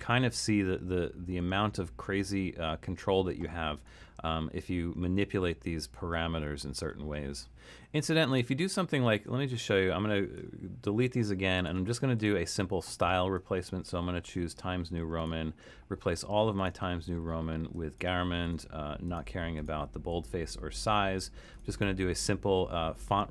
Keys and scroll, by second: 10.4 BackSpace, 11.7 BackSpace, 14.2 BackSpace, 18.5 BackSpace.